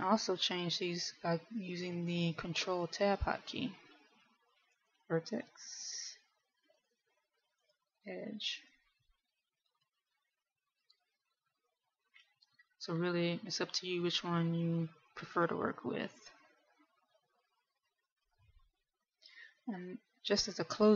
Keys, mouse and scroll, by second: 4.6 ctrl+Tab, 8.6 ctrl+Tab, 10.1 right click, 11.4 right click, 12.6 right click, 20.2 middle click.